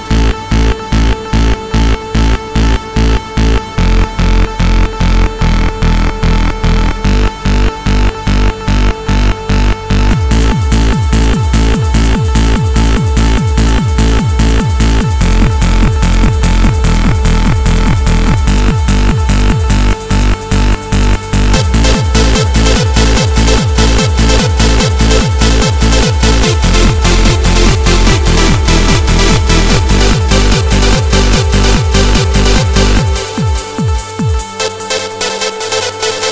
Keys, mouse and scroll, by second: 3.8 click, 7.7 click, 12.5 click, 17.4 click, 20.1 right click, 22.2 click, 24.8 right click, 26.6 click, 27.9 click, 31.0 click.